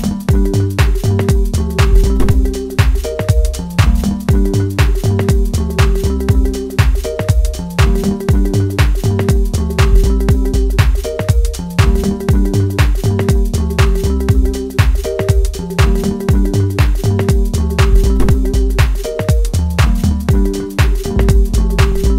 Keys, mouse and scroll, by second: 1.8-3.8 middle drag, 3.8-8.3 drag, 8.3-9.8 middle drag, 9.8-10.3 scroll down 1, 10.3-14.3 middle drag, 14.3 click, 15.9-16.3 scroll down 1, 16.3-21.5 middle drag, 21.5-21.9 scroll down 1, 21.9-22.1 middle drag.